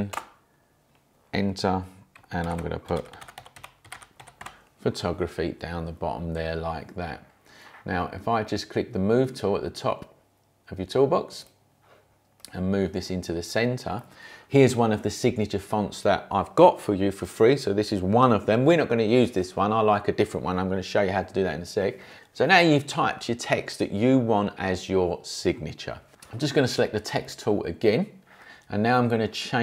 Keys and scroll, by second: 0.1 Return, 2.1-4.9 typing.